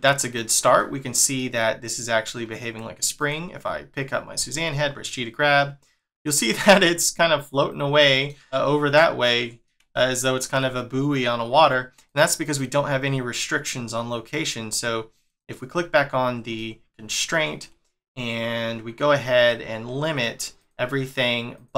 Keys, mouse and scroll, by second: 0.3 scroll up 1, 0.8 middle click, 3.2 click, 4.4 g, 8.0 middle click, 9.2 middle click, 12.0 click, 12.4 click, 14.3-15.3 scroll up 1, 15.3 click, 16.6 shift+middle click, 20.6 click, 21.5 click.